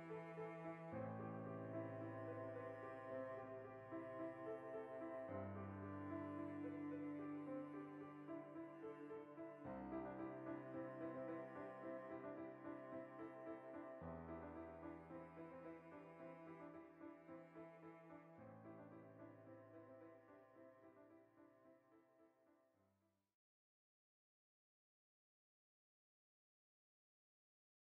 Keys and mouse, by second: 0.1 right click, 0.3 ctrl+r, 0.8 alt+shift+right click, 1.2 ctrl+b, 2.3 click, 2.4-3.6 middle drag, 3.4 ctrl+r, 3.6 right click, 3.7 middle click, 4.1 ctrl+r, 4.7 alt+shift+right click, 5.2 ctrl+b, 7.1 click, 7.3 middle click, 7.6 Tab, 7.7-12.3 middle drag, 12.3 right drag, 12.5 Tab, 12.7 ctrl+middle click, 13.6 ctrl+r, 15.8 right click, 15.9 middle click, 16.6 3, 16.8 middle click, 16.9-18.9 alt+shift+right drag, 18.9-20.5 drag, 20.3 Tab, 20.5-25.1 ctrl+middle drag, 21.9 a, 25.4-27.4 shift+middle drag.